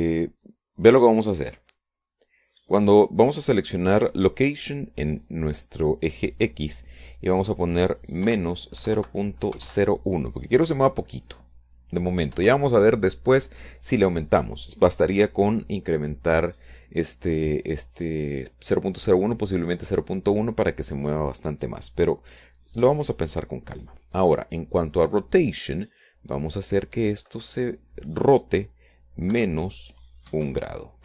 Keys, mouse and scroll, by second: 8.2 click, 11.1 KP_Subtract, 11.6 KP_0, 11.7 KP_Decimal, 12.3 KP_0, 12.5 KP_1, 15.2 KP_Enter, 29.9 click.